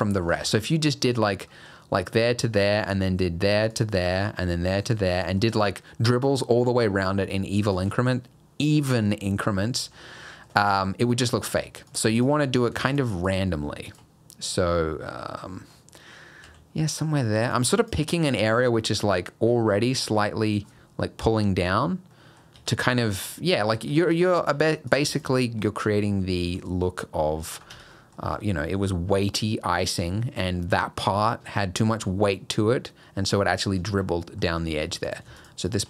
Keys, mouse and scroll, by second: 0.0 middle click, 0.3 alt+a, 0.5 middle click, 1.5 middle click, 2.6 middle click, 3.7 click, 4.0 middle click, 5.1 middle click, 8.2 middle click, 9.7 middle click, 10.0 scroll up 2, 10.2 middle click, 10.8 middle click, 11.4 Tab, 11.5 middle click, 11.9 click, 12.2 shift+click, 12.9 click, 13.3 click, 13.9 shift+click, 14.7 middle click, 16.5 e, 17.8 click, 18.2 middle click, 19.0 middle click, 22.1 middle click, 22.6 Tab, 22.8 middle click, 24.0 middle click, 24.5 Tab, 24.9 click, 25.2 shift+click, 25.4 middle click, 25.8 g, 27.7 Tab, 27.9 middle click, 34.1 middle click, 34.8 Tab, 35.1 click, 35.4 shift+click, 35.7 shift+click.